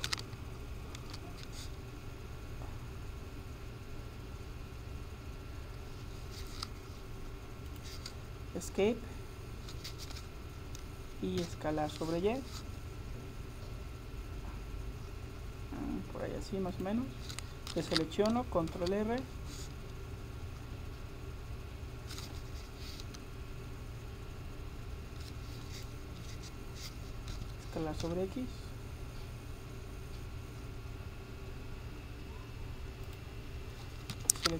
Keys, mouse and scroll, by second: 1.1 ctrl+r, 11.5 s, 17.8 a, 18.8 ctrl+r, 27.3 s, 34.1 a.